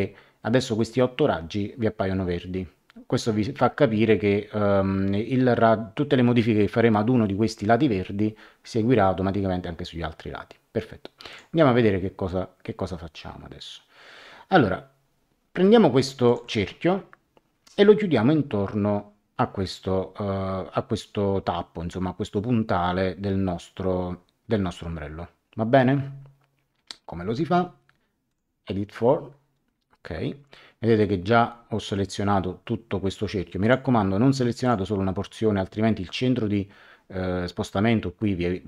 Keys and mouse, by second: 11.3 click, 16.2 click, 28.3 click, 33.6 click.